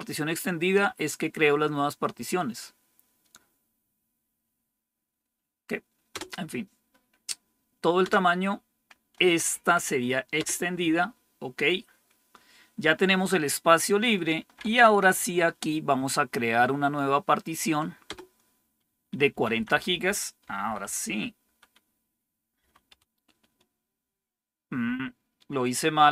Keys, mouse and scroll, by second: 6.0 Return, 7.9 Return, 9.4 Right, 10.3 Return, 14.4 Down, 18.0 Return, 19.0 Left, 19.2 Left, 19.4 Left, 19.6 Left, 20.0 Left, 20.3 Delete, 20.7 Delete, 21.2 Delete, 21.4 Delete, 22.5 typing.